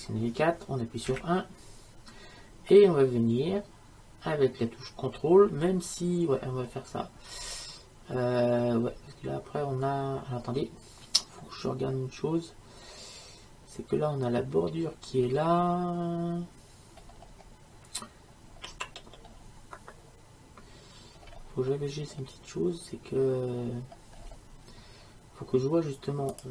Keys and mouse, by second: 1.2 KP_1, 5.8 middle click, 7.4-9.0 middle drag, 15.3-18.6 middle drag, 24.7-26.5 middle drag.